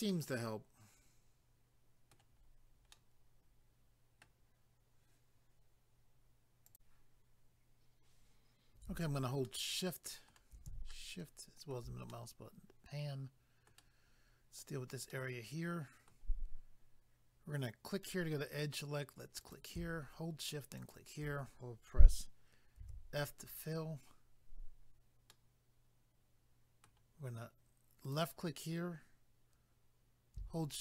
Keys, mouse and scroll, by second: 0.1 middle click, 1.0 middle click, 2.4-2.8 scroll down 1, 2.9 middle click, 6.7 click, 6.8 click, 9.5 shift+middle click, 10.9 shift+middle click, 12.1 middle click, 14.1 scroll up 1, 15.1 middle click, 18.0 click, 18.1 click, 19.4 click, 19.5 click, 20.8 shift+click, 20.9 shift+click, 25.3 middle click, 28.0 click, 28.1 click.